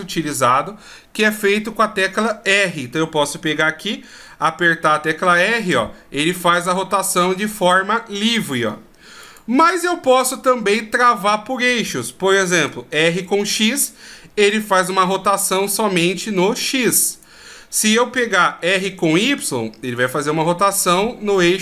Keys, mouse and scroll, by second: 4.1 r, 9.8 middle click, 12.5 r, 18.2 r.